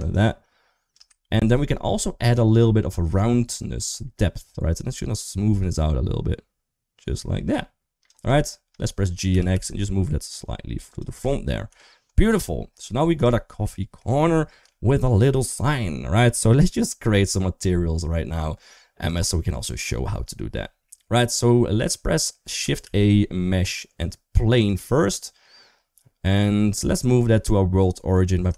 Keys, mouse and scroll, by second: 1.0 ctrl+z, 3.7-7.9 shift+drag, 8.5 middle click, 9.1 g, 11.5 KP_1, 12.4 middle click, 12.8 scroll down 1, 13.4 middle click, 14.5 shift+middle click, 16.8 middle click, 21.5 middle click, 22.6 shift+a, 26.4 middle click, 26.7 middle click, 28.4 shift+s.